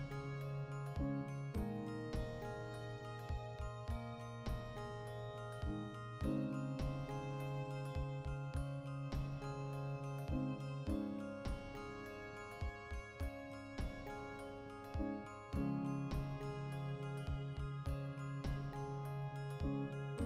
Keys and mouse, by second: 2.6 \, 5.4 x, 7.8 right click, 8.1 KP_Decimal, 8.2-9.9 middle drag, 9.7 3, 9.9-11.5 right drag, 11.5 x, 12.5 1, 12.6 right click, 13.1 g, 13.5-15.5 ctrl+middle drag, 14.6 ctrl+r, 15.5 right click, 15.8 2, 16.0 right click, 16.7 middle click, 17.0 right click, 17.5-20.2 middle drag, 18.3 alt+q, 19.9 KP_Decimal.